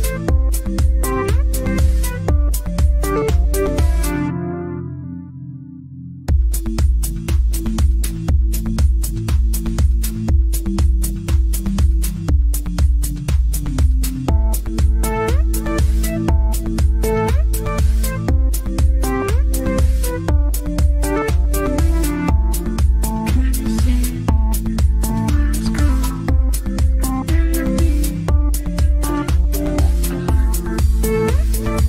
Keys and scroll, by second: 2.8 z.